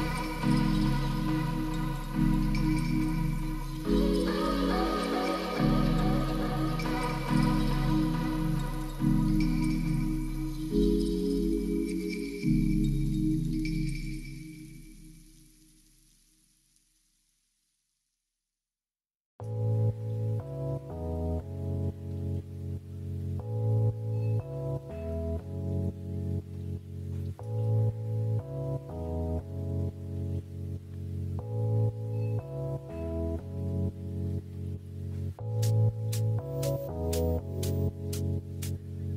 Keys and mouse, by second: 0.6 shift+middle click, 1.4 middle click, 1.9 middle drag, 2.2 Tab, 2.9 2, 2.9 click, 3.5 click, 3.8 middle drag, 4.5 e, 4.8 z, 6.8 ctrl+click, 7.5-8.1 drag, 8.6 ctrl+b, 10.2 click, 10.5 Tab, 11.1 right click, 12.0 ctrl+middle click, 12.4 ctrl+s, 12.8-13.5 middle drag, 13.8 middle click, 14.3 s, 14.6 y, 16.5 middle click, 16.9 ctrl+s, 21.0-22.3 middle drag, 22.9 middle click, 23.2 shift+a, 26.4 middle drag, 26.9 alt+r, 27.2 g, 27.4 y, 27.8 x, 28.9 ctrl+click, 29.3 r, 29.6 z, 30.1 9, 30.2 0, 30.8 Return, 31.6 g, 31.9 z, 33.1-34.7 drag, 36.0-38.3 typing, 38.3 Return.